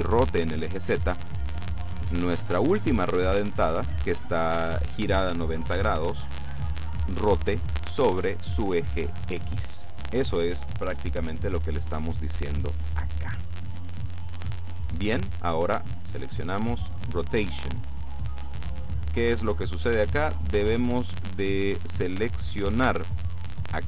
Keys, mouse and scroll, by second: 17.0 click.